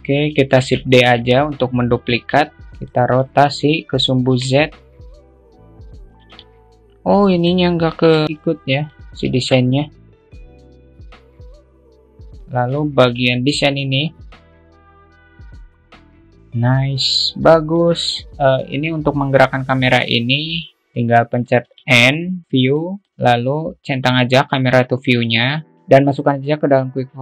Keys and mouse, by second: 1.2 shift+d, 3.4-4.2 alt+middle drag, 6.5 r, 6.9-8.2 middle drag, 9.3 Delete, 9.3 click, 9.9 click, 10.2 shift+d, 10.4 click, 10.9 alt+middle click, 11.1 click, 11.2 ctrl+z, 11.3 click, 11.6 middle click, 11.7 click, 12.1 alt+middle click, 13.2-14.5 shift+middle drag, 14.5 alt+z, 14.6 click, 15.6-16.6 drag, 17.5 click, 17.9-18.6 alt+middle drag, 18.3 shift+q, 19.4 middle click, 20.8 q.